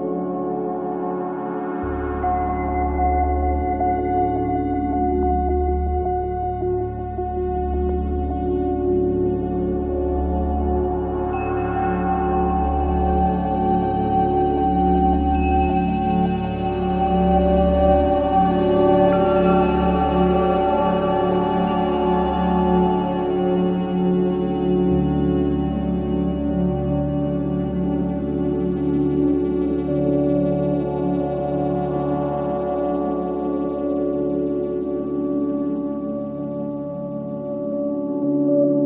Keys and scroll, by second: 1.9 F3, 5.5 c, 6.1 Escape, 8.9 b, 9.3 Escape, 12.0 F2, 21.7 space, 21.9 Escape, 36.9 Escape, 37.3 g.